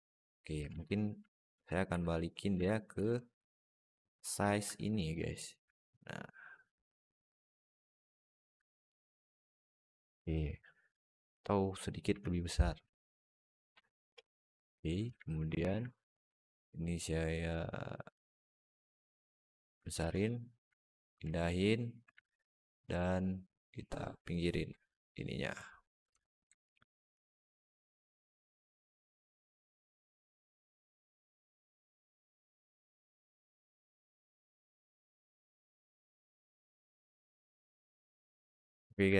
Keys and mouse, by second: 0.5 ctrl+z, 1.0 ctrl+z, 1.4 ctrl+z, 1.7 ctrl+z, 2.4 ctrl+z, 2.8 ctrl+z, 3.3 alt+middle click, 3.8 ctrl+z, 4.2 ctrl+z, 4.8 alt+middle drag, 5.6-8.3 alt+middle drag, 8.9 alt+middle drag, 10.6-11.1 middle drag, 11.9 s, 13.9-14.6 middle drag, 14.8 Tab, 15.2 alt+middle click, 15.4 alt+z, 16.1 click, 17.4-19.3 drag, 19.8 alt+z, 20.1 middle click, 21.1 shift+click, 22.0 alt+middle click, 23.4-25.0 drag, 25.9 Tab, 26.4-26.9 alt+middle drag, 27.3-30.6 alt+middle drag, 31.1 alt+middle drag, 32.3 alt+middle drag, 33.0 alt+shift+middle drag, 35.6 click, 35.9 Tab, 36.3 Tab, 36.8 alt+middle drag, 37.1 alt+shift+middle drag, 37.7 alt+middle drag, 38.0 alt+shift+middle drag, 38.4 alt+shift+middle drag, 39.0 alt+middle drag.